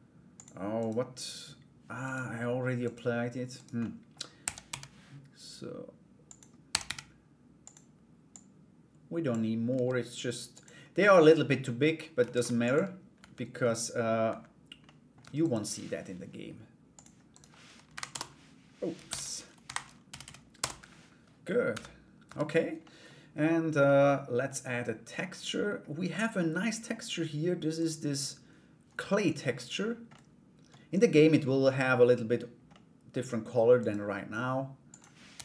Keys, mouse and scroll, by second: 0.3 right click, 1.6 right click, 2.4 right click, 3.1 right click, 3.4 middle click, 6.2 s, 7.9 click, 9.3 s, 10.7 middle click, 11.9 ctrl+a, 12.7 /, 13.2 middle click, 13.8 /, 14.4 middle click, 14.8 Tab, 15.0 right click, 16.5 click, 16.9 right click, 17.5 Delete, 18.6 ctrl+z, 19.2 Delete, 19.8 Down, 21.3 /, 21.8 Tab, 22.4 middle click, 23.4 middle click, 25.7 middle click, 27.3 right click, 29.7 middle click, 30.8 middle click, 32.3 middle click, 33.4 right click, 34.4-35.4 drag.